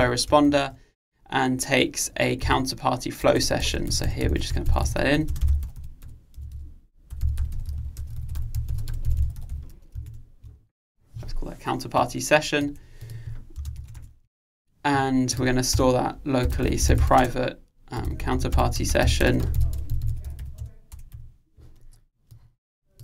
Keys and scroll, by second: 0.1 Return, 10.2 alt+Return.